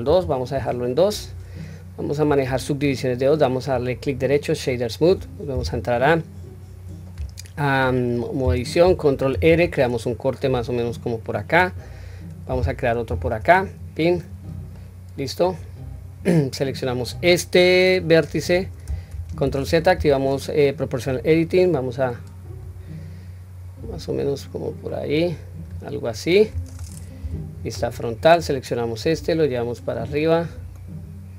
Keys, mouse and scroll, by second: 0.1 ctrl+2, 3.5-4.7 right drag, 5.6 Tab, 6.3-8.6 scroll up 2, 9.3 ctrl+r, 13.1 ctrl+r, 14.7-15.4 middle drag, 15.6-16.2 scroll down 2, 16.9 click, 18.0 click, 19.1 ctrl+z, 19.9 o, 21.1 click, 21.3-25.6 drag, 26.1-26.7 middle drag, 27.2 KP_1, 27.5-28.2 scroll up 1, 28.2 drag, 28.2 scroll up 1, 29.0-31.3 drag.